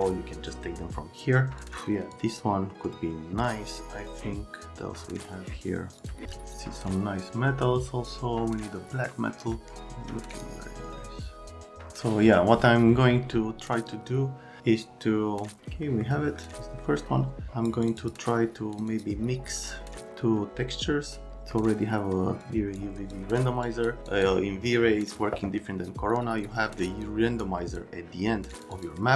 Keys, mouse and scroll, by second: 1.6 click, 2.1 click, 6.0 click, 10.3 click, 17.5 click, 17.8 click, 17.9 click, 18.9 click, 19.6 right click, 22.4 click, 23.1 click, 23.6 click, 24.1 click, 26.2 right click, 27.4 click, 28.5 click, 28.7 click.